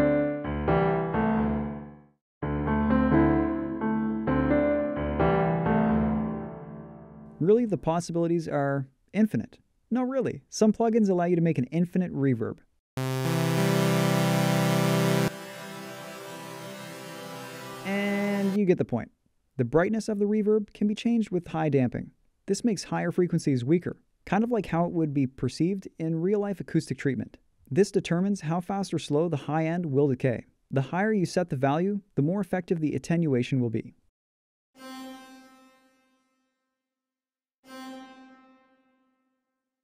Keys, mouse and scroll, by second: 19.9-23.6 drag.